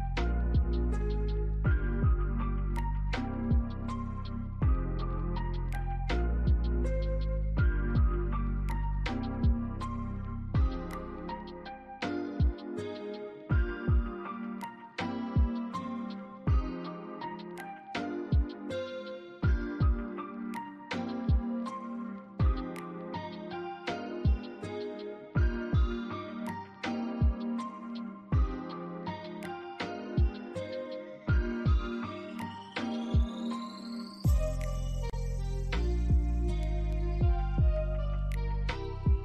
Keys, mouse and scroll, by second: 0.2 scroll up 1, 4.3 double click, 5.9 alt+g, 7.4 double click, 11.3 scroll down 1, 13.9 alt+middle click, 15.7 alt+middle click, 16.3 scroll up 1, 16.9 scroll down 1, 25.2 scroll down 1, 25.5 alt+middle click, 31.4 double click, 36.0 double click, 36.4 scroll up 1, 37.7 double click.